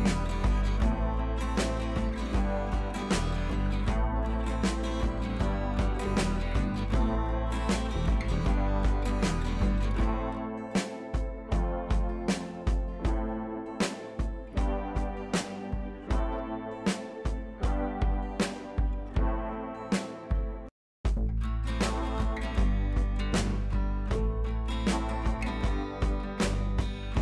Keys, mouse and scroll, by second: 1.1 ctrl+z, 1.5-2.0 shift+click, 2.4-2.8 click, 3.3-4.0 drag, 5.0-5.6 shift+drag, 6.2 drag, 9.1 click, 13.5 click, 15.5-16.6 drag, 18.0 alt+scroll down 1, 19.1-19.8 shift+drag, 20.6-21.4 scroll up 2, 21.6-22.2 alt+click, 22.4 ctrl+z, 23.0-23.6 shift+click, 23.7 scroll up 1, 24.2 alt+scroll up 1, 24.7 scroll down 2, 25.0 alt+click, 25.8-26.1 shift+click, 26.4-26.8 click.